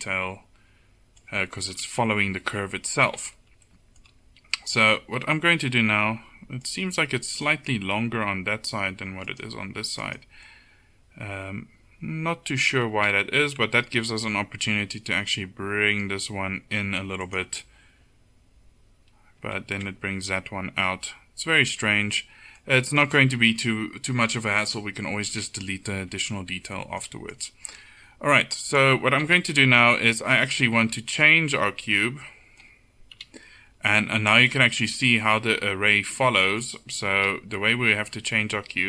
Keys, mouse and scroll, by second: 1.2 middle click, 1.8 KP_7, 6.1 Tab, 7.1 Tab, 7.8 Tab, 13.5 g, 19.7 ctrl+z, 25.4 KP_7, 26.1 Tab, 29.3 KP_7, 30.2 Tab, 33.2 KP_7, 37.3 KP_7.